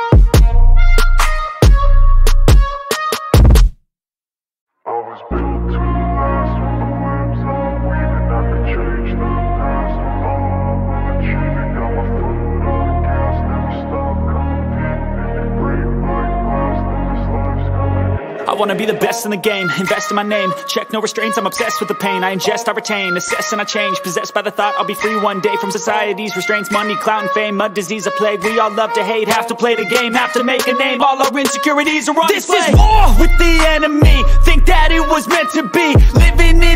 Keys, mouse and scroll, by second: 1.4 click, 2.1 click, 3.8 click, 4.2-5.0 drag, 5.8 click, 7.3-9.4 drag, 11.5 click, 12.3 click, 13.5 click, 14.5-15.5 drag, 15.8 click, 17.7 click, 19.9-21.7 drag, 24.6 click, 25.1 click, 26.4-26.9 drag, 27.4-28.4 drag, 29.7 click, 30.9 click, 32.1 click, 33.6 scroll up 1, 33.7-34.2 drag, 34.2 scroll up 1, 35.0 scroll down 1, 35.8 scroll down 1, 36.6 scroll up 1.